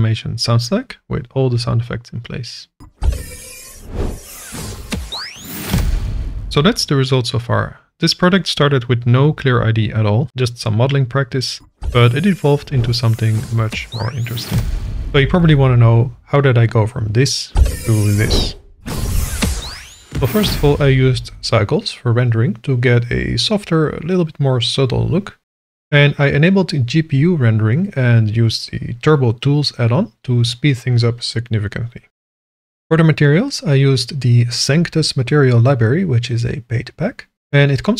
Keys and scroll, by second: 21.6 KP_1, 21.8 0, 32.5 /.